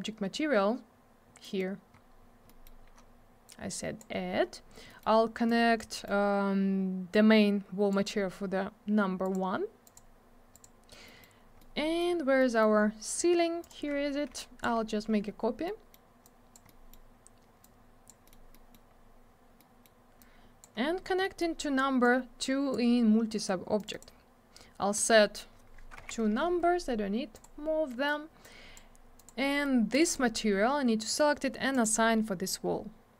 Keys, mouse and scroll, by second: 1.4 middle click, 1.6 middle click, 2.0 scroll down 1, 2.5 middle click, 2.6 middle click, 2.8-3.5 scroll up 1, 3.5 click, 4.4 scroll up 1, 4.9 middle click, 5.0 middle click, 5.5 click, 5.9 middle click, 6.0 middle click, 7.1 click, 9.2 click, 9.3 click, 9.8 click, 9.9 click, 10.5 click, 10.6 click, 11.0 middle click, 11.2 middle click, 11.3 scroll down 1, 11.6 middle click, 12.1 scroll down 1, 12.4 middle click, 12.7-13.0 scroll up 1, 13.6 click, 13.7 click, 14.4 shift+click, 15.7 middle click, 16.2 click, 16.7 middle click, 17.6 click, 18.2 middle click, 18.3 middle click, 18.5 middle click, 18.7 double middle click, 18.9 scroll up 1, 19.3 scroll down 1, 19.6 middle click, 20.2 click, 20.7 scroll up 1, 21.2 middle click, 21.4 middle click, 22.0 click, 23.8 click, 23.9 click, 23.9 click, 24.0 double click, 24.9 click, 25.0 click, 26.0 2, 27.3 click, 27.4 click, 27.9 middle click, 28.1 middle click, 28.4 click, 29.2 click, 29.2 click, 29.5 scroll up 1, 29.6 double middle click, 29.9 click, 30.0 click, 30.0 click, 30.1 double click, 31.7 click, 31.8 click.